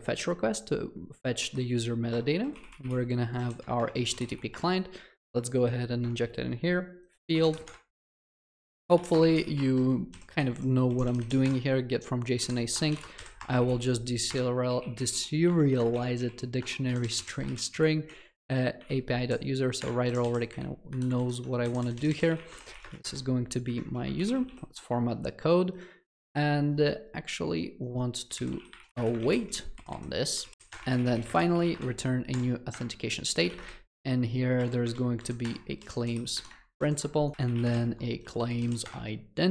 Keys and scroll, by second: 3.7 Return, 5.6 alt+Return, 9.1 Return, 23.7 Escape, 24.5 ctrl+alt+l, 34.9 Escape, 38.9 Return.